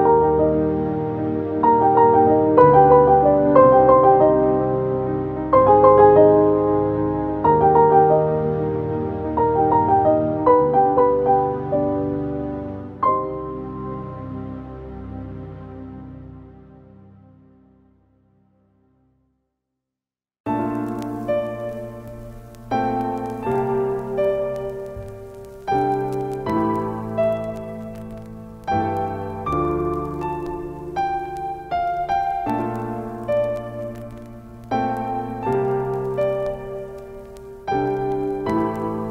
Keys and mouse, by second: 1.0-4.5 drag, 9.0 click, 12.3 click, 16.2-19.2 typing, 19.5 Return, 21.0 click, 27.0 click, 30.9 0, 35.5 click, 37.4 click.